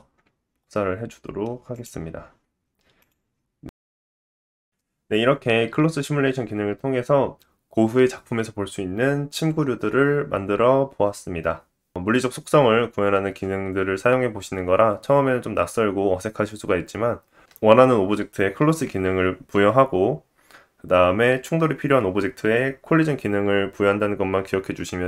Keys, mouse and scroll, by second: 0.4-25.0 middle drag, 0.5 click, 1.6 scroll down 1, 2.4 scroll up 1, 2.7 scroll down 1, 4.9 scroll down 1.